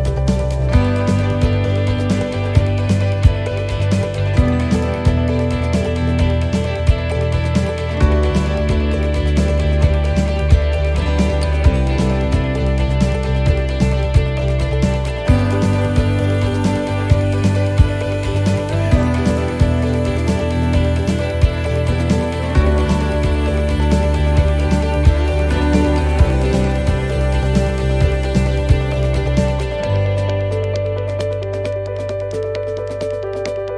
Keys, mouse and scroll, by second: 0.2 scroll up 1, 0.5 middle click, 1.2 shift+middle click, 2.0 right click, 2.6 c, 4.6 middle click, 6.4 click, 10.2 s, 14.7 middle click, 15.1-15.4 scroll up 2, 15.5 middle click, 16.8 click, 17.5 middle click, 18.7 right click, 19.0 shift+right click, 19.8 middle click, 20.5 middle click, 21.5 shift+right click, 22.1 shift+right click, 23.6 shift+right click, 24.2 s, 28.9 middle click, 28.9 right click, 29.2 shift+right click, 30.5 middle click, 30.5 shift+right click, 31.5 shift+right click, 32.6 s.